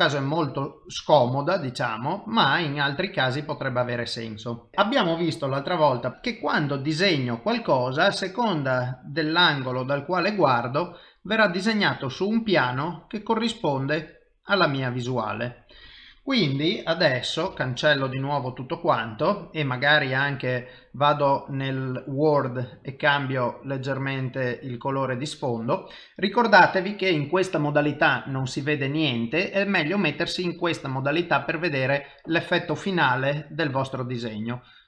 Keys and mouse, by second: 0.0 KP_5, 0.6 KP_5, 1.0 middle click, 3.7 KP_5, 6.1 click, 7.7 middle click, 9.0 click, 10.5 middle click, 12.2 click, 13.5 click, 13.5 i, 15.2 i, 17.5 b, 20.0 click, 21.7 click, 24.7 i, 26.1 middle click, 30.7 click, 32.5 click.